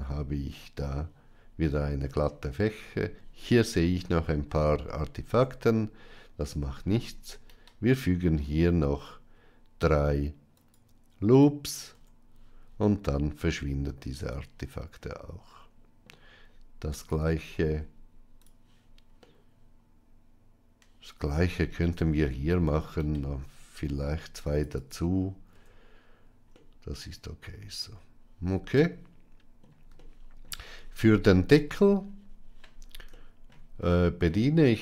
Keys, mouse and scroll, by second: 1.8 middle click, 5.1 Tab, 6.3 Tab, 7.5 ctrl+r, 11.8 Tab, 12.9-15.9 middle drag, 16.8 click, 19.1-21.2 middle drag, 22.0 Tab, 22.9 ctrl+r, 25.4 Tab, 26.5-29.5 middle drag, 29.9-30.3 shift+middle drag, 33.2 shift+middle click, 33.8-34.2 middle drag, 34.7 Tab.